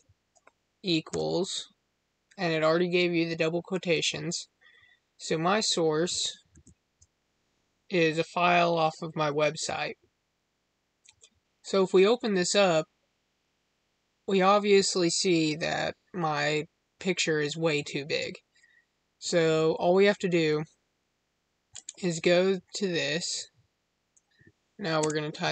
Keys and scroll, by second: 6.4 ctrl+v, 24.9 space.